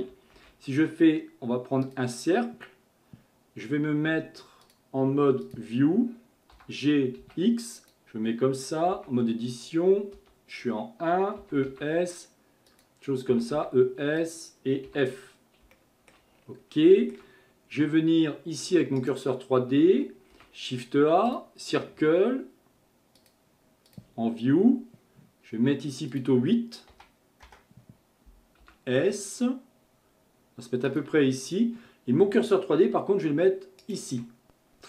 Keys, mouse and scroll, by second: 0.4 shift+a, 4.6-6.6 drag, 6.6 g, 8.9 Tab, 15.7 shift+middle click, 16.4-16.9 scroll up 2, 16.9-19.0 shift+middle drag, 19.0 shift+right click, 20.3 shift+a, 23.2-28.6 drag, 28.6 s, 33.8 shift+right click.